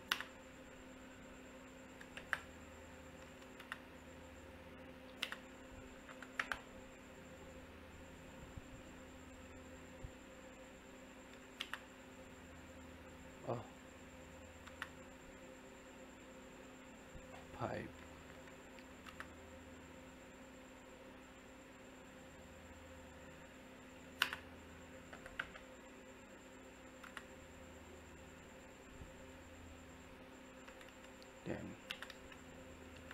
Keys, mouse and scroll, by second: 0.0 space, 2.7 scroll up 1, 2.9 middle click, 3.6 space, 4.3 click, 5.0 d, 5.2 space, 8.0 click, 11.6 space, 12.1 click, 14.6 space, 15.4 click, 18.9 c, 19.0 space, 22.1 click, 23.9 d, 24.1 space, 25.8-26.4 scroll up 1, 26.4 click, 26.8 e, 27.0 space, 28.9 click, 31.6 e, 31.9 space, 32.9 Home.